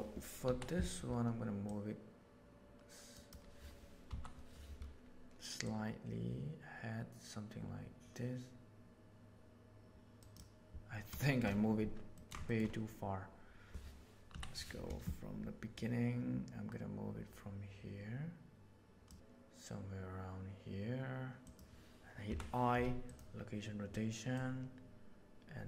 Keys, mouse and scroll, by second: 0.4 Down, 1.6-3.2 right drag, 4.1 Up, 5.7 click, 5.8-8.3 middle drag, 8.3-10.4 drag, 11.2 shift+middle click, 12.1 ctrl+middle click, 12.4 shift+middle click, 14.3 Down, 15.7 right click, 16.3-19.0 drag, 22.2 i, 24.3-25.6 drag.